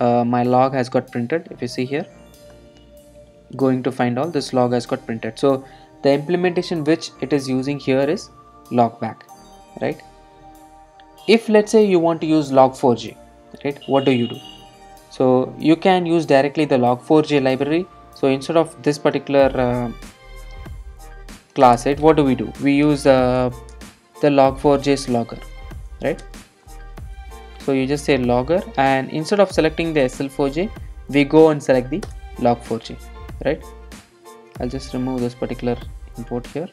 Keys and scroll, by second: 14.5 ctrl+shift+super+F12, 19.7 super+/, 23.4 Return, 32.1 Return.